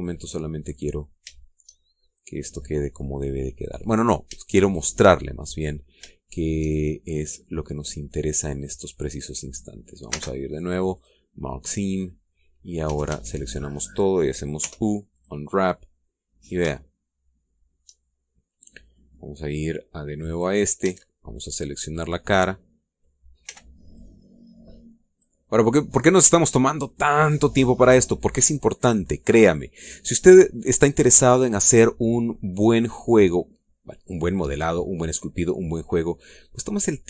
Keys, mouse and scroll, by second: 0.1 scroll up 1, 1.3-1.7 scroll up 1, 2.2-4.7 shift+middle drag, 4.8 scroll up 2, 5.5 shift+right click, 6.1 shift+scroll down 2, 7.1 shift+middle click, 7.6-10.9 shift+middle drag, 10.9 space, 11.7 click, 13.7 a, 15.4 u, 16.0 click, 16.7 scroll down 2, 17.5-18.8 shift+middle drag, 19.0 shift+scroll up 2, 19.8 middle click, 21.1 click, 21.7 a, 22.2-24.0 middle drag, 24.3 b, 24.7-26.2 drag, 27.0-27.4 scroll down 2, 27.7-28.9 middle drag, 29.5-30.7 middle drag, 30.9 scroll up 2.